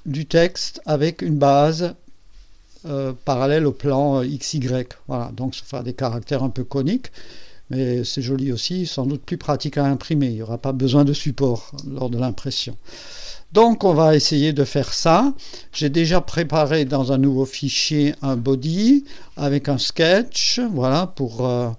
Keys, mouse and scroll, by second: 0.0 click, 0.5 space, 1.1 click, 3.1 click, 4.8 click, 6.9-8.4 drag, 11.7 space, 12.6-14.6 drag, 15.5 click, 20.2 click.